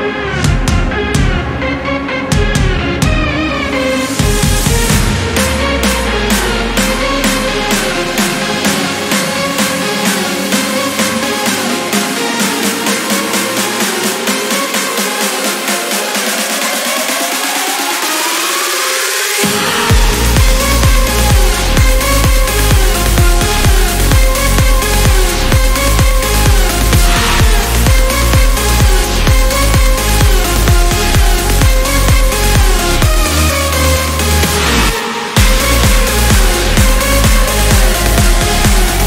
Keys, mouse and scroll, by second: 2.8 click, 12.3-13.7 drag, 15.0 click, 16.8 click, 18.4 click, 19.2 1, 20.0-20.4 scroll down 2, 20.7 1, 21.0 2, 22.0-22.4 scroll up 2, 22.8 1, 23.9 scroll up 2, 27.0-28.8 drag, 29.4 click, 30.4 click, 33.0 click, 37.4 click.